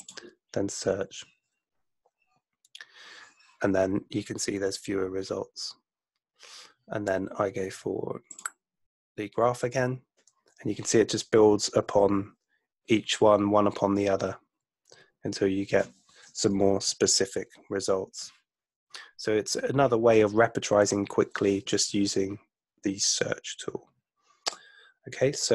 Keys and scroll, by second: 16.7 super+F2.